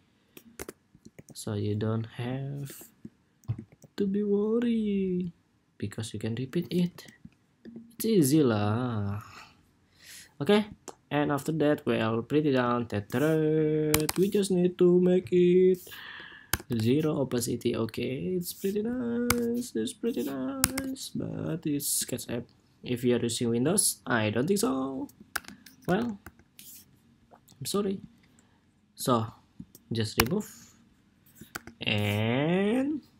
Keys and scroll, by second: 0.8 ctrl+c, 3.4 ctrl+c, 6.6 ctrl+c, 7.9 ctrl+c, 21.8 super+s, 25.1 super+-, 25.6 super+=, 31.3 super+-, 33.0 super+s.